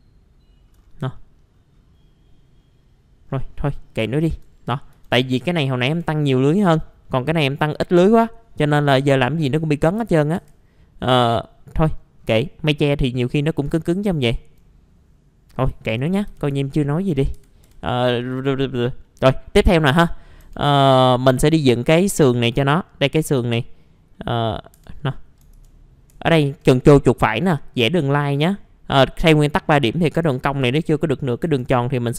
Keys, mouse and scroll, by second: 0.8 scroll down 1, 1.1 middle click, 1.5-3.2 scroll up 1, 3.2-3.7 scroll down 1, 3.7 middle click, 4.1 alt+middle click, 4.6-4.9 scroll up 1, 5.0 middle click, 5.9 F4, 6.0-6.6 scroll up 1, 6.6-7.0 scroll down 1, 7.0 middle click, 8.0 scroll up 1, 9.8 click, 10.5 F4, 11.1 scroll down 1, 11.8 middle click, 12.0 scroll down 1, 12.2 scroll up 1, 13.2 middle click, 13.9 scroll down 1, 14.1 alt+middle click, 14.6-15.4 scroll up 1, 15.5 scroll down 1, 16.3 typing, 16.7-17.1 scroll down 1, 17.1 middle click, 17.3 F4, 17.9 middle click, 18.3 click, 18.7 scroll up 1, 19.0-20.2 middle drag, 20.4 F3, 21.4 middle click, 24.7 F3, 25.0 middle click, 26.3 ctrl+right click, 27.2-28.2 drag, 31.4 F3.